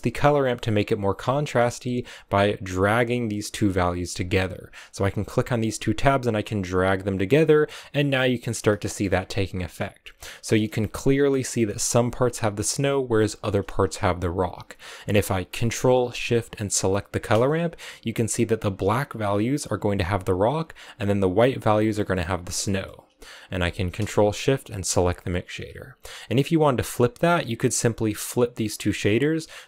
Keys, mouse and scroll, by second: 0.1-2.0 scroll up 2, 2.0-7.5 drag, 7.5-8.8 middle drag, 9.0-10.3 scroll up 4, 10.3-13.3 shift+middle drag, 13.8-17.1 drag, 22.6-24.9 middle drag, 24.9 ctrl+shift+click, 27.0-29.6 middle drag.